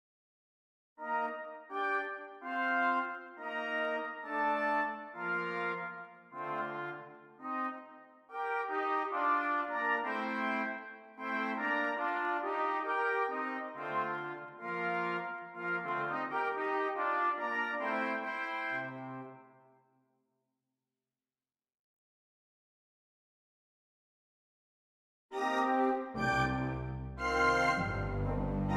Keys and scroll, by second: 0.8 ], 6.1 ], 11.0 [, 15.4 ], 21.8 y, 23.6 Escape, 25.1 ].